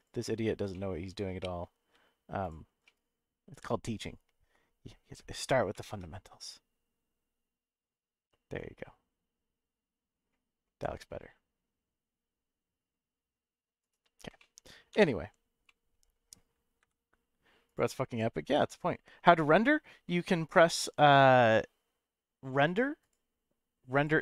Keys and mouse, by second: 0.7 middle click, 2.4 alt+shift+click, 2.8-4.6 middle drag, 5.7 ctrl+b, 13.8 right click, 14.4 middle click, 14.9 Tab, 15.6-16.4 middle drag, 16.8 x, 22.6 click, 23.0-24.2 drag.